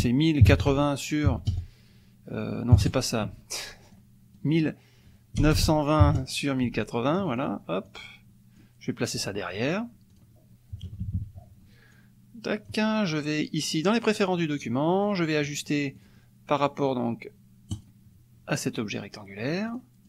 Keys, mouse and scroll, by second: 0.0-1.5 typing, 0.8 Tab, 2.7 KP_0, 3.9 click, 5.4 BackSpace, 6.0 KP_2, 7.1 click, 7.9 click, 10.1 click, 10.8 KP_Subtract, 11.9 click, 14.0 click, 15.1 click, 16.0 click, 17.7 click, 19.7 click.